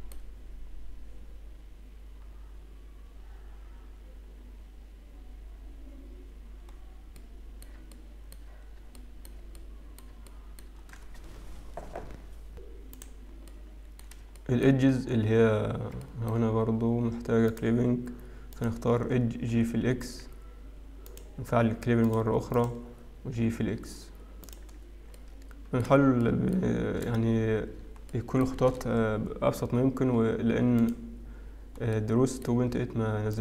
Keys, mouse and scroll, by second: 0.2 shift+middle click, 2.2-2.7 scroll up 1, 7.5 middle click, 7.5-8.0 scroll down 2, 8.2 shift+middle click, 9.1 middle click, 9.7 middle click, 10.5 shift+middle click, 14.2 middle click, 14.6 shift+middle click, 15.2-15.9 scroll up 3, 16.2 shift+middle click, 16.6 scroll up 1, 17.5 click, 18.7 click, 19.6 g, 22.1 click, 22.6 click, 24.0 g, 24.7-25.3 scroll down 2, 25.3 middle click, 26.5 shift+middle click, 29.1 shift+middle click, 31.4 shift+click, 32.8 middle click.